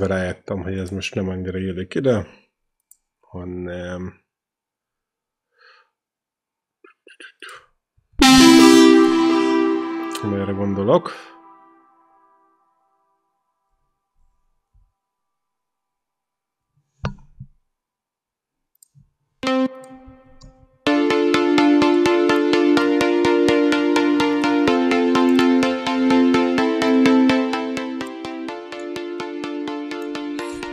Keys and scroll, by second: 7.5-9.3 typing, 15.0 p, 19.2 q, 20.3 ctrl+v, 20.7 space.